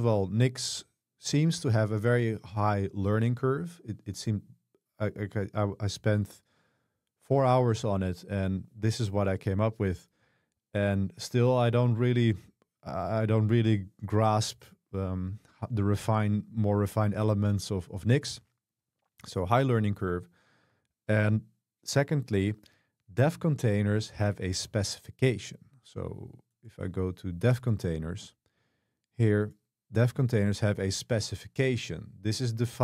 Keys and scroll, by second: 24.7 super+1.